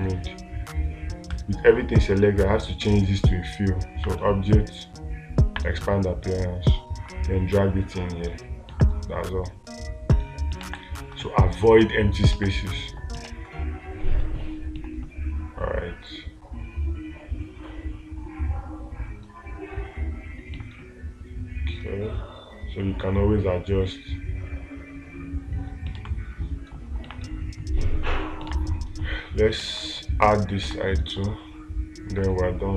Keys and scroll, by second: 11.1 space, 12.8 space, 13.7 space, 26.4 space, 28.9 space, 31.1 space.